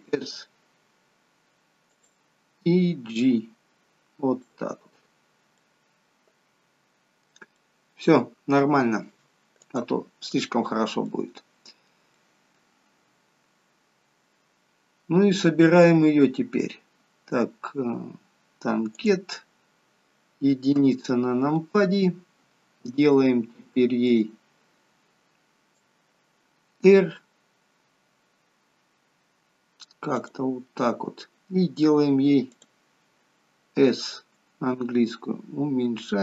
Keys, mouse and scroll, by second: 3.1 click, 4.6-5.3 scroll down 5, 5.6 middle click, 7.5 middle click, 7.5 scroll up 1, 9.7 click, 11.1 middle click, 12.1 middle click, 16.3 scroll down 3, 19.0 click, 19.0-19.6 scroll down 1, 19.6-20.0 scroll down 2, 20.8 KP_1, 24.0 click, 25.7 click, 30.2 click, 32.4 click, 34.2 s.